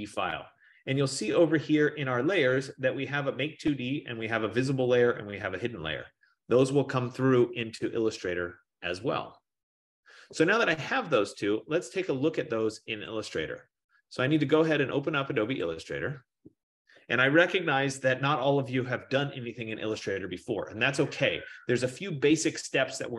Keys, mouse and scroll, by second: 0.0-1.5 drag, 1.6-7.6 drag, 13.4 click, 15.6 click, 20.7 click.